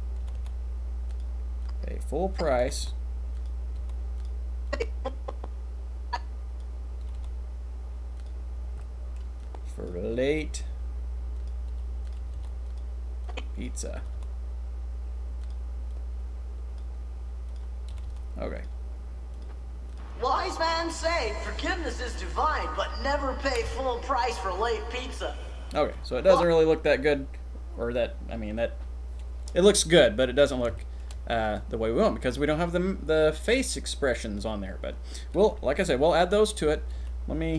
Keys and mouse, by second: 0.3 r, 0.5 r, 1.6-2.4 drag, 2.6 middle click, 2.8 r, 3.7 r, 4.7-6.6 drag, 7.0 r, 7.2 r, 8.8 click, 10.3 r, 11.7 r, 12.2 r, 12.5 r, 12.6 click, 13.2-13.7 drag, 14.1 r, 14.1 r, 15.9-16.8 drag, 17.4 click, 17.9 r, 18.0 r, 19.9 click, 26.2 click, 30.7-31.1 shift+middle drag, 31.3 middle click, 36.5 click, 37.1 g.